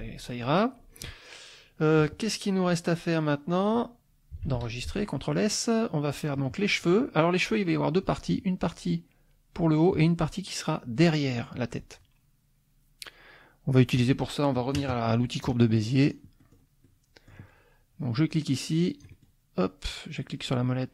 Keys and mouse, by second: 0.5 click, 1.2 click, 2.3 click, 2.8 click, 4.4 ctrl+s, 5.8 click, 16.0 click, 16.4 middle click, 16.8 click, 18.3-19.4 drag.